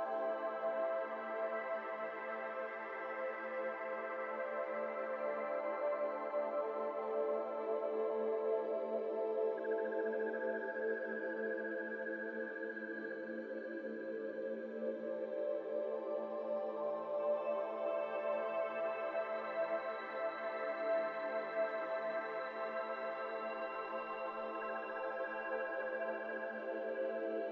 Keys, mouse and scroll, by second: 0.5 KP_0, 1.4-2.0 scroll up 1, 2.0 r, 2.0 r, 3.2 shift+middle click, 3.6 g, 4.9 z, 5.0 z, 5.3 r, 7.4 KP_1, 8.1 KP_7, 8.9 KP_3, 9.3 KP_1, 9.8 alt+z, 10.0-10.8 scroll up 8, 10.4 shift+middle drag, 10.8 r, 10.9 r, 11.7 g, 14.4 z, 14.5 z, 15.4 alt+z, 15.6-17.2 middle drag, 17.2 g, 19.5 x, 19.6 x, 19.7 x, 19.8 scroll down 2, 20.0-21.7 shift+middle drag, 21.7 ctrl+z, 22.3 ctrl+z, 23.6 shift+click, 24.1 click, 24.7 click, 25.4 shift+click, 26.6 ctrl+p.